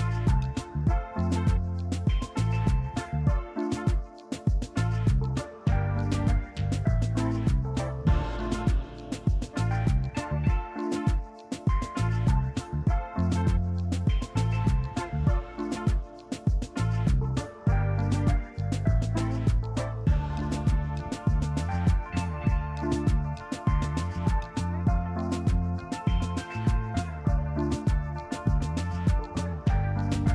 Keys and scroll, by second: 0.4 Delete, 1.6 i, 6.4 r, 9.0 q, 14.1 q, 14.9 e, 16.3 f, 16.9 F3, 18.2 f, 20.4 b, 23.8 s, 25.1 Delete, 27.7 f, 28.0 F3, 29.9 ctrl+z.